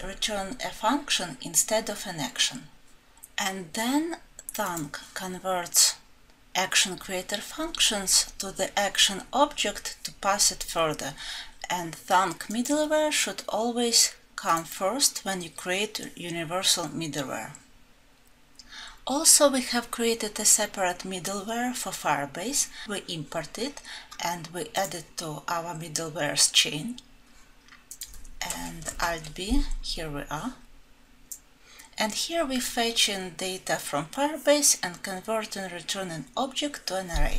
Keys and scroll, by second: 28.9 ctrl+b.